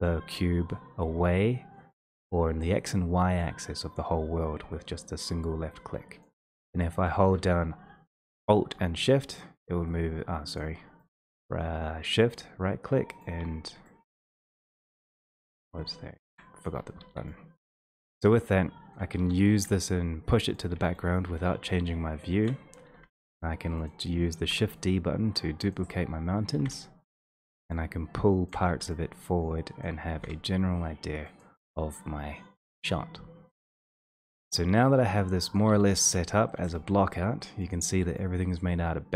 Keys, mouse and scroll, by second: 6.4 shift+click, 10.8 shift+middle click, 13.5 shift+middle click, 14.1-16.3 scroll, 14.7 shift+middle click, 16.1 shift+middle click, 16.6 click, 17.2 w, 19.4 w, 20.6 click, 20.7 w, 22.4 shift+middle click, 23.0 d, 24.1 click, 24.6 d, 26.0 click, 26.7 d, 27.4 click, 27.5 w, 28.8 w, 30.0 click, 30.3 d, 31.4 click, 34.4 w, 35.8 click, 35.9 w, 37.0 ctrl+z, 37.7 click, 38.1 w.